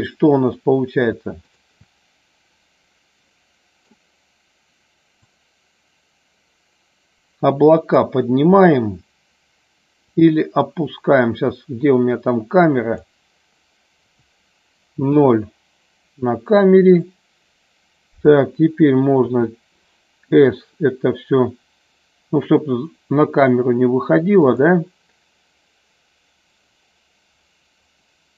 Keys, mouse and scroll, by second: 3.3 middle click, 5.2-8.0 drag, 10.1-13.0 drag, 15.2 KP_0.